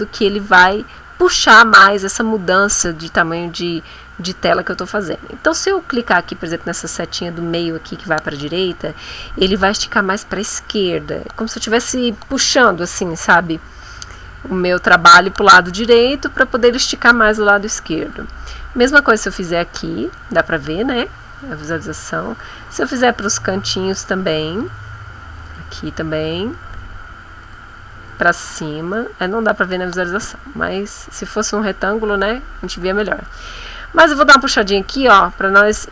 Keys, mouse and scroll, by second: 8.4 click, 18.0 click, 18.9 click, 21.6 click, 22.7 click, 24.6 click, 25.5 click, 27.4 click, 28.1 click, 29.3 click, 30.2 click, 31.1 click, 31.7 click, 34.9 click.